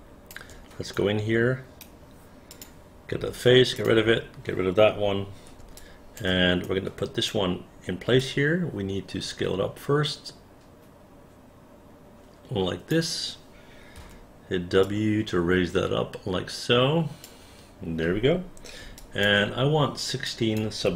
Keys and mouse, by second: 0.0 alt+click, 1.1 alt+right click, 2.6 click, 3.3 Delete, 3.9 click, 4.2 Delete, 5.9 alt+click, 6.8 alt+right click, 8.3-13.0 drag, 14.1 w, 15.0-17.4 drag, 19.1 alt+click, 20.4 click.